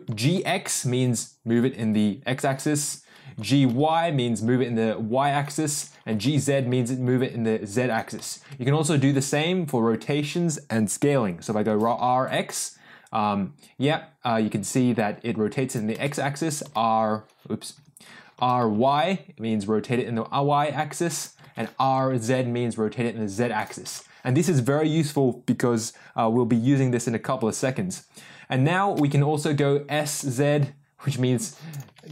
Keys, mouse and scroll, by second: 0.0 g, 2.8 ctrl+z, 3.3 g, 5.6 ctrl+z, 6.1 g, 8.1 ctrl+z, 11.6 r, 15.9 ctrl+z, 16.6 g, 18.3 r, 21.4 ctrl+z, 21.8 r, 23.8 ctrl+z, 28.9 s, 31.8 ctrl+z.